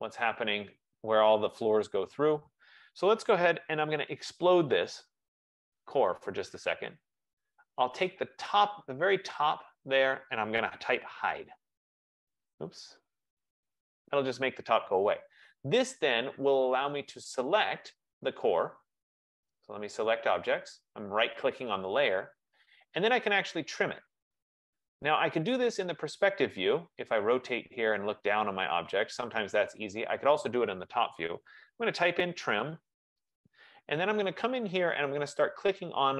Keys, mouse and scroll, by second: 4.2-5.7 typing, 7.0 click, 7.8 typing, 8.4 click, 9.5 F15, 9.5 click, 11.1-13.9 typing, 16.9-17.7 typing, 18.3-20.5 right drag, 20.9 click, 29.9 right click, 32.2-33.4 typing, 35.5 click.